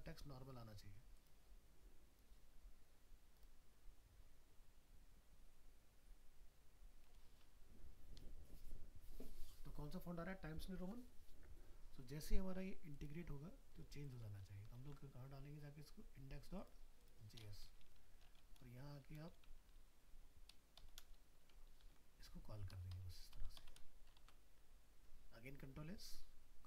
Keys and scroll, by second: 14.5 ctrl+s, 14.8 ctrl+w, 18.1 ctrl+Home, 21.8 ctrl+v.